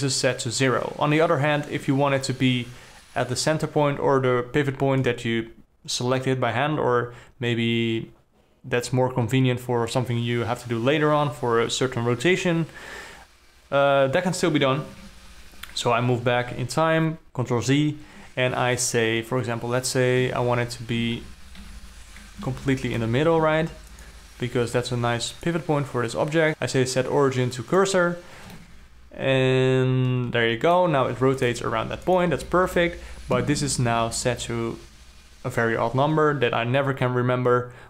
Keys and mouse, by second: 15.4 ctrl+z, 20.7 Tab, 21.6 alt+a, 22.1 l, 23.1 shift+s, 23.9 Tab, 24.5-25.2 drag, 25.8-28.3 drag, 29.2-31.4 alt+middle drag, 31.4 r, 32.0 r, 33.0 alt+middle click.